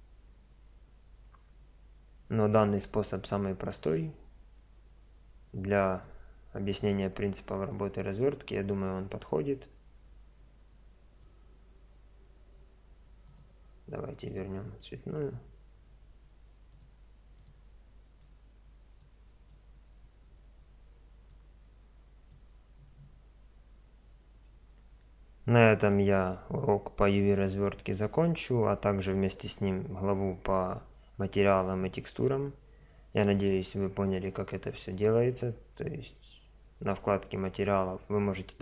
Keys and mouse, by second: 6.0-7.5 middle drag, 8.2-9.3 middle drag, 9.8-10.9 middle drag, 18.5-19.7 middle drag, 20.3-22.3 middle drag.